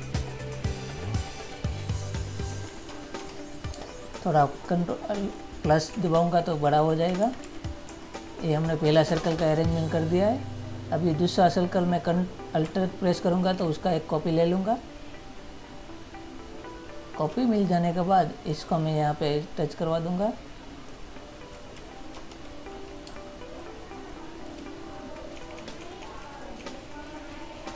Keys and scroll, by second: 3.0 ctrl++, 3.9 space, 6.1 Right, 7.4 ctrl+-, 23.2 space, 25.5 Down.